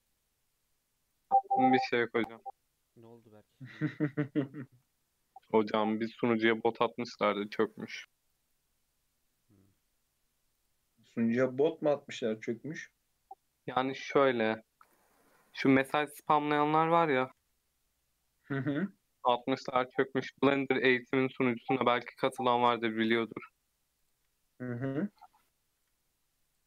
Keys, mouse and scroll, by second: 1.4 Tab, 2.0 Tab, 3.0 3, 3.2 alt+z, 4.3 KP_1, 5.1-5.6 scroll up 2, 5.6-5.9 shift+middle drag, 5.9 alt+z, 6.4-6.8 scroll up 4, 6.8 3, 7.2-7.5 shift+middle drag, 7.5-8.1 shift+scroll up 4, 8.1 click, 8.5 click, 9.8 x, 10.8-11.2 scroll down 3, 11.2-12.0 scroll up 2, 12.0 alt+z, 12.3 scroll down 1, 12.5-13.5 middle drag, 13.5 scroll down 1, 13.8 Tab, 14.3 alt+z, 14.9 alt+z, 15.2 Tab, 15.6 scroll down 1, 15.7 middle click, 16.3 Tab, 17.4 /, 17.8-18.2 middle drag, 18.2 scroll up 2, 18.5 middle click, 18.9 Tab, 19.7 click, 20.4 x, 21.8 click, 22.1 x, 23.0-24.0 middle drag, 24.0 click, 24.2 x, 25.1-25.6 scroll up 3, 25.6-25.9 scroll down 1, 25.9 3, 26.4 click.